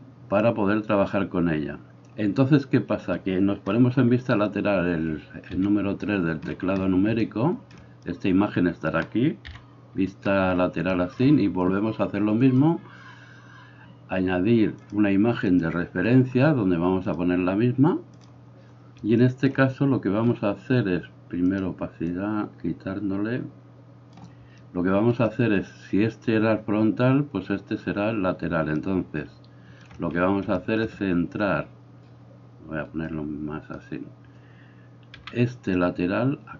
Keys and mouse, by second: 5.5 KP_3, 9.6 KP_3, 12.5-21.6 drag, 21.6 middle click, 22.2-36.5 drag, 35.2 g.